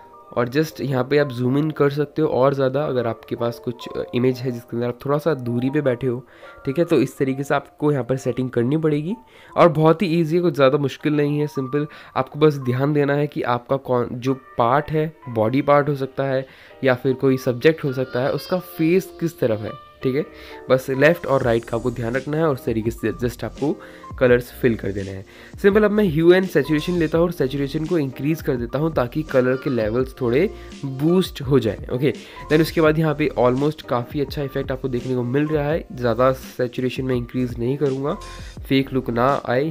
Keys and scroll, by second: 5.6 [, 5.6 [, 5.7 [, 5.7 [.